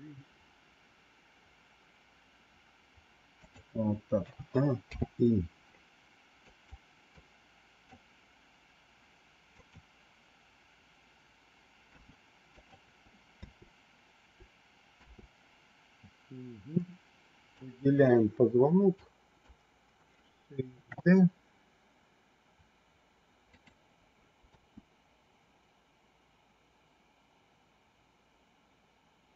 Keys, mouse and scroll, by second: 4.2 a, 4.8 i, 6.4 click, 7.0 click, 9.4 click, 11.8 g, 13.1 space, 14.9 space, 16.6 click, 18.9 click, 20.8 shift+d, 24.4 space.